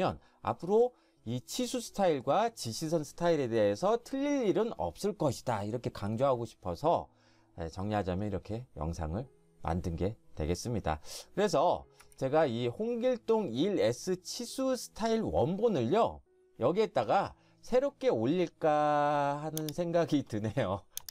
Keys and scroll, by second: 12.0 Escape.